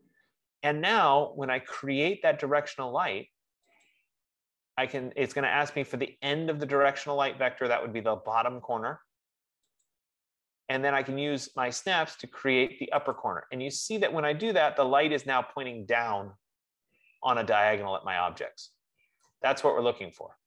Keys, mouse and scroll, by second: 4.1-9.1 drag, 10.3-13.6 drag, 19.4 right click.